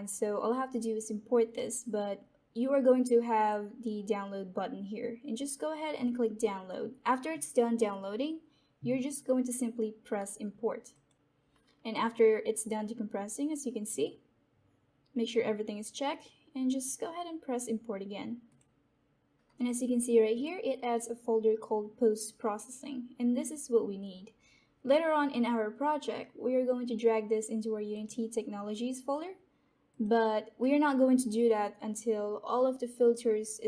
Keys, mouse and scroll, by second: 10.8 click, 15.2-18.4 drag, 20.3 click, 27.8 click.